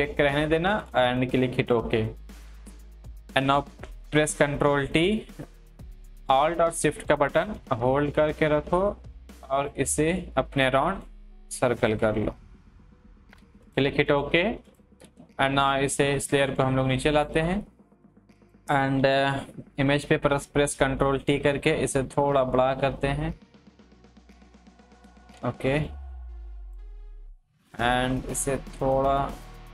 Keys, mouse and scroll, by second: 1.6 click, 4.3 ctrl+t, 7.0-17.1 alt+shift+drag, 19.0 ctrl+t, 21.2-29.7 drag.